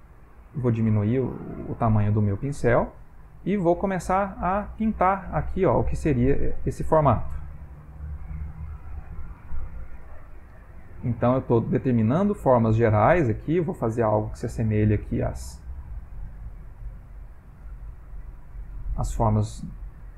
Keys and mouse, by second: 3.1 click, 3.8 click, 4.7 click, 5.4 click, 5.8 click, 6.4 click, 6.6 click, 7.1 click, 7.6 click, 8.3 click, 8.7 ctrl+middle click, 9.6 click, 10.0 click, 11.1 f, 11.8 click, 12.4 click, 12.7 click, 13.1 click, 13.5 click, 13.9 click, 14.4 click, 14.9 click, 15.3 click, 15.6 click, 15.8 click, 16.1 click, 16.4 click, 17.2 click, 17.6 click, 18.2 click, 18.5 click, 18.9 click, 19.8 click.